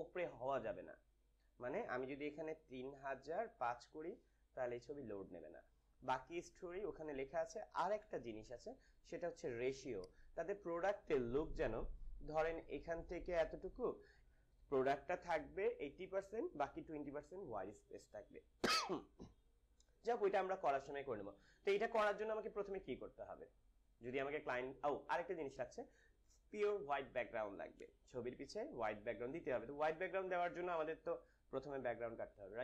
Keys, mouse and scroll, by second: 7.9 BackSpace, 9.9 click, 11.7 ctrl+-.